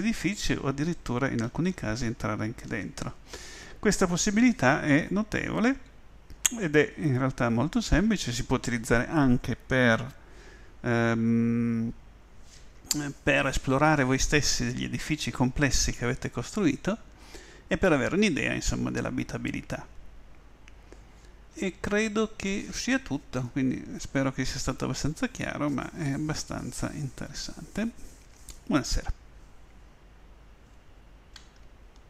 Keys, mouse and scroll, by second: 2.7 w.